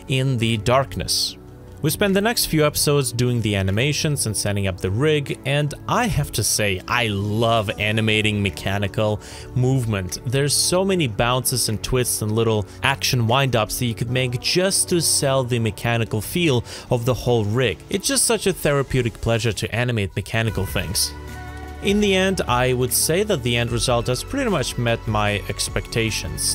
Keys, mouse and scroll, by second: 1.4 ctrl+z, 1.5 alt+middle click, 1.7 space, 2.1 space, 2.5 middle click, 3.2 space, 4.0 space, 4.2 shift+middle click, 4.9 g, 5.5 Escape, 6.7-12.2 typing, 7.5 ctrl+z, 13.3 space, 13.9 space, 14.9-19.0 typing, 15.2 ctrl+c, 17.7-18.1 scroll down 2, 19.4-19.7 scroll up 1, 19.8 middle click, 21.4 g.